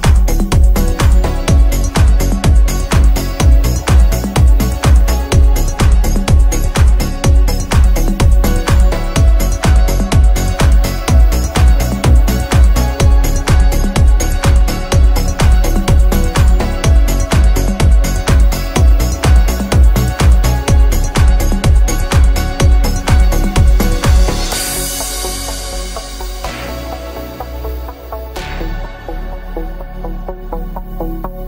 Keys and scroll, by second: 20.1 KP_Add.